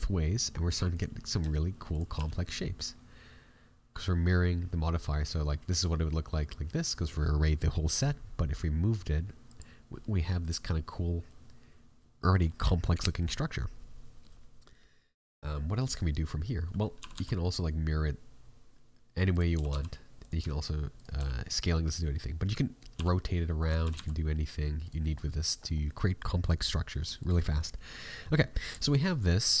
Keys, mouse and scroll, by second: 0.3 scroll up 1, 0.8 scroll up 1, 0.9 right click, 1.4 s, 2.1 g, 9.7-10.1 scroll down 3, 10.0 middle click, 12.4 middle click, 12.7 scroll up 6, 13.1 shift+middle click, 14.1 middle click, 16.6-17.0 scroll down 3, 16.9 r, 22.6-23.3 scroll down 2, 22.9 r, 24.9 middle click, 25.5 scroll up 4, 25.7 middle click, 26.3 middle click, 27.0 shift+middle click, 27.4 middle click, 27.8 middle click, 28.1 scroll up 2, 28.4 middle click, 28.7 shift+middle click, 29.1-29.6 scroll down 5.